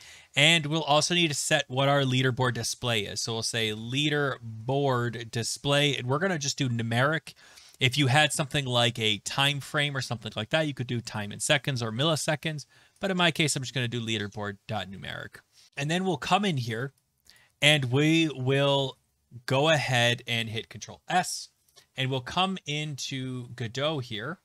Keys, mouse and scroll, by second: 0.0-0.5 typing, 3.3-5.3 typing, 15.7 Return, 15.8 Return, 17.4 click, 17.7 click, 18.3-19.5 scroll down 6, 19.5-20.1 scroll down 2, 20.4 click, 20.5 scroll, 20.6 ctrl+s, 21.9 alt+Tab, 22.2 ctrl+s, 22.2 alt+Tab, 22.2 click.